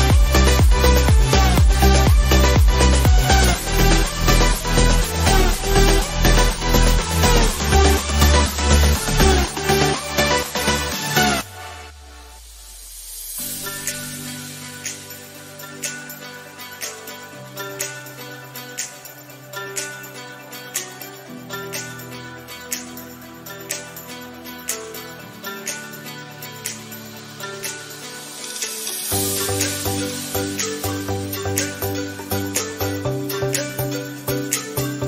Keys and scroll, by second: 8.7 ctrl+0, 17.7 ctrl+z.